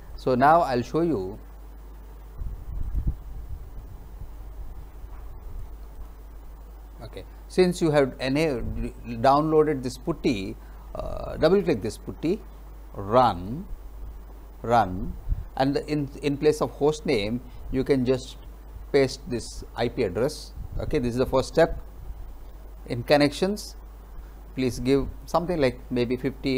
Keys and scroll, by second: 18.2 ctrl+v.